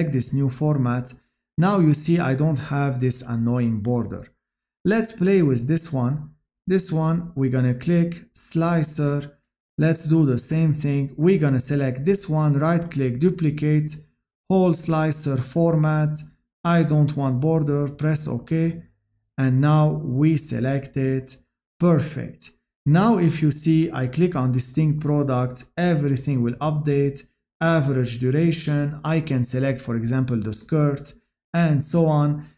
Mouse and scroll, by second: 19.6 click.